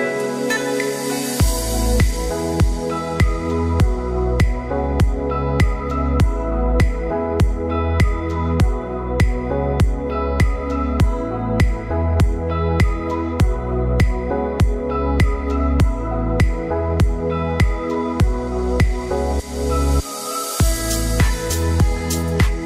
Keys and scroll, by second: 3.3 ctrl+d, 18.8 ctrl+d.